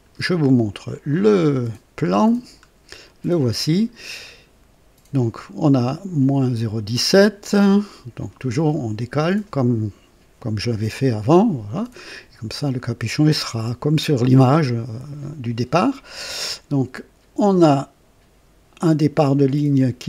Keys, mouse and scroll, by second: 0.9 click, 2.3 scroll down 2.